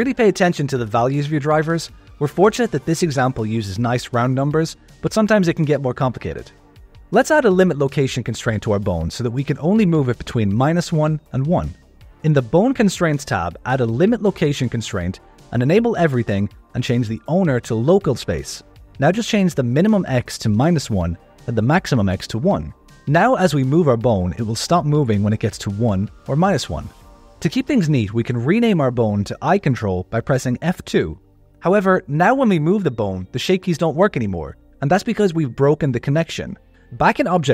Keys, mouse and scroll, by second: 7.5 click, 11.5 click, 13.4 click, 13.8 click, 14.2 click, 14.6 click, 15.0 click, 15.5 click, 16.1 click, 17.3-18.9 drag, 20.5 click, 21.9 click, 23.1 g, 27.4 click, 28.8 F2, 32.6 g, 36.8 click.